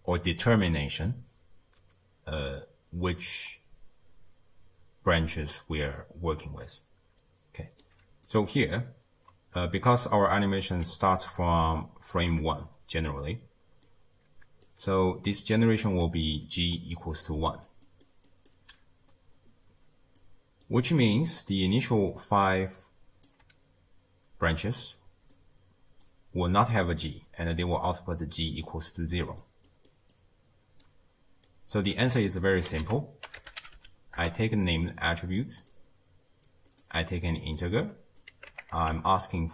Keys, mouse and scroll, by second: 3.1 click, 12.1 shift+space, 13.9-15.3 drag, 15.3-16.0 middle drag, 16.0-18.5 typing, 16.6 click, 17.5 click, 17.9 click, 18.3 click, 20.2-21.7 middle drag, 21.7 d, 22.1-23.3 drag, 23.3 d, 23.4 d, 25.4-26.8 middle drag, 26.8-31.9 typing, 27.1 click, 29.2 click, 29.7 click, 30.1 click, 31.5 right click, 32.2 middle click, 32.9 ctrl+a, 35.6-37.3 drag, 38.2-39.5 drag.